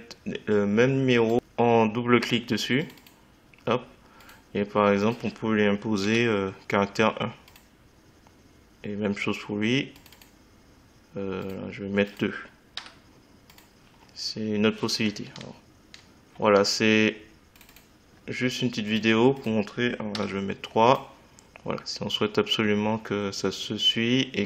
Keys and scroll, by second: 13.2 2, 20.6 3.